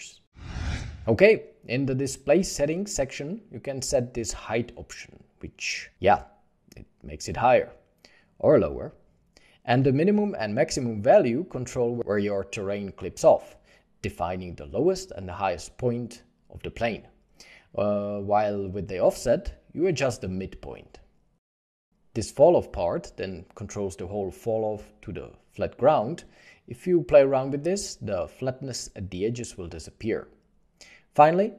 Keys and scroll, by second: 4.2 1, 4.3 Return, 4.8 1, 8.5 ., 8.7 Return, 8.7 5, 13.0 0, 13.0 Return, 15.0 Return, 16.7 -, 16.9 1, 17.0 Return, 18.1 ., 18.3 Return, 18.3 5, 19.3 ., 19.6 1, 19.8 5, 19.9 Return, 21.2 ., 21.3 2, 21.4 5, 21.5 Return.